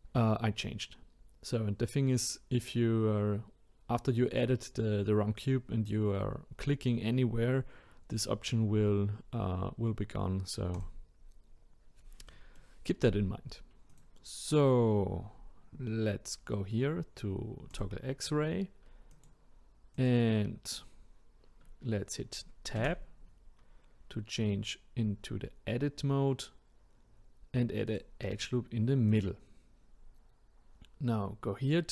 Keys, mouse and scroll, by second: 10.7 click, 12.3-13.9 middle drag, 13.9 click, 17.7-19.2 drag, 19.9 click, 22.8 Tab, 27.9-31.9 drag.